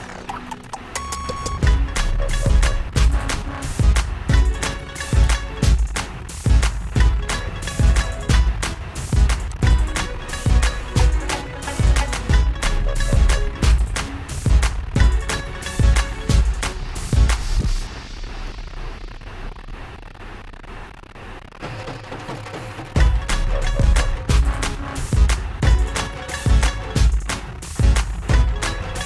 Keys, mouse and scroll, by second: 0.7-1.3 shift+scroll, 1.4-3.8 shift+scroll, 3.8-5.9 shift+scroll, 8.4 click, 9.8 click, 12.0 click, 15.7 click, 18.7 click, 26.0 click, 26.9 click.